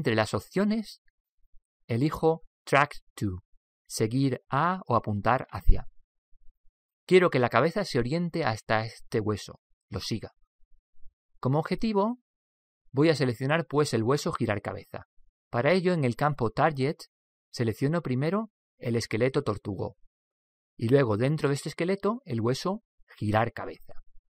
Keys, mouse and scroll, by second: 17.3 click, 21.3 click.